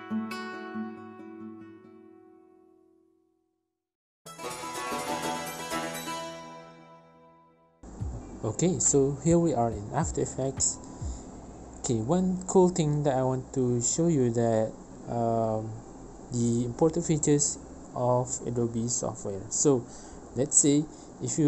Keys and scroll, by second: 7.8 ctrl+s, 12.5 ctrl+s, 20.2 ctrl+s.